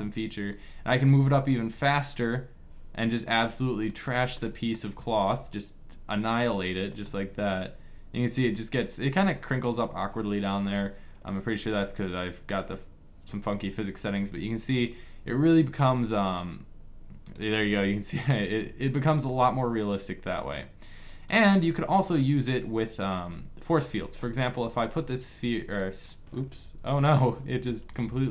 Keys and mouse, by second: 0.0 right click, 1.5 click, 4.1-6.8 drag, 10.5-13.7 drag, 15.0-17.5 drag, 18.9-22.9 drag, 22.9 middle click, 23.5-27.5 drag, 27.2 shift+d, 28.0 middle click.